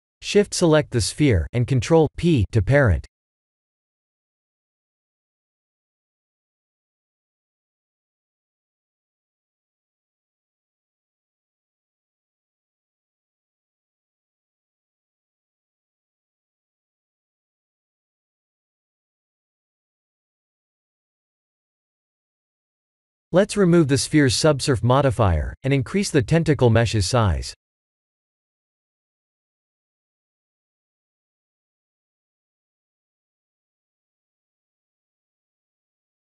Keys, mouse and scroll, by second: 3.7 ctrl+p, 6.3 drag, 8.0 click, 9.4 click, 10.1 click, 13.9 click, 15.1 drag, 18.9 click, 25.2 click, 26.2 s, 27.7 click, 32.0-33.4 middle drag.